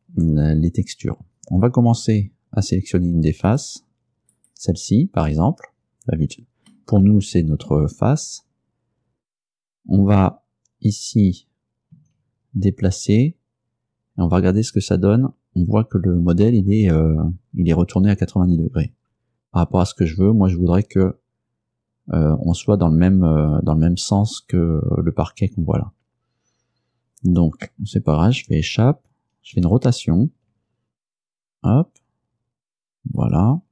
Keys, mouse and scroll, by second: 3.6 click, 4.4 right click, 6.8-7.9 middle drag, 12.0 g, 28.2 Escape, 29.6 r, 33.3 ctrl+click.